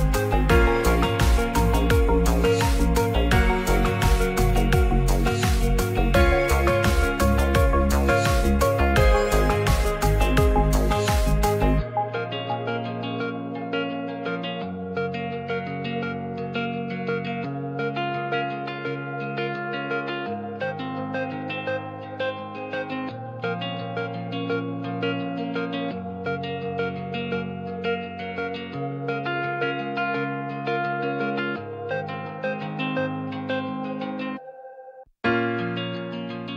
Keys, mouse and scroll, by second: 0.7 shift+middle click, 1.0 click, 1.6 g, 1.8 z, 2.5 right click, 2.8 g, 3.0 z, 6.2 s, 6.4 z, 6.7 click, 6.9 g, 7.0 z, 7.4 drag, 8.0 ctrl+s, 8.2 middle click, 8.5 scroll down 1, 9.0 Tab, 9.7 Tab, 10.5 g, 10.6 z, 11.8 click, 12.6-13.2 middle drag, 16.3 shift+d, 16.5 right click, 17.2 click, 19.0 shift+middle drag, 19.2 shift+scroll down 1, 19.5 scroll up 1, 19.6 middle click, 19.7 scroll down 1, 20.0-21.0 shift+drag, 23.3 shift+d, 23.7 g, 23.8 z, 26.1 Tab, 26.7 alt+z, 27.0 click, 29.5 click, 30.0 g, 30.1 z, 31.1 click, 31.5 Tab, 32.4 middle drag, 33.4 shift+d, 33.6 right click, 34.5 r, 34.6 KP_9, 34.7 KP_0, 34.9 KP_Enter, 34.9 KP_3, 35.5 Escape, 36.3 ctrl+z.